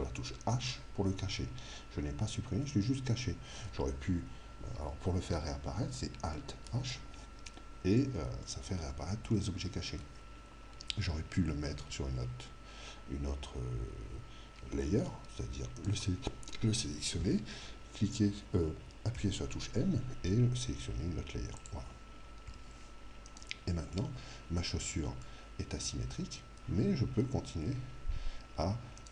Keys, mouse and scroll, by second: 0.5 h, 6.7 alt+h, 8.1-12.9 middle drag, 15.8 right click, 19.1 m, 22.2-23.4 middle drag, 23.4 right click, 23.9 click, 24.9-26.9 middle drag, 27.7 Tab, 29.0 right click.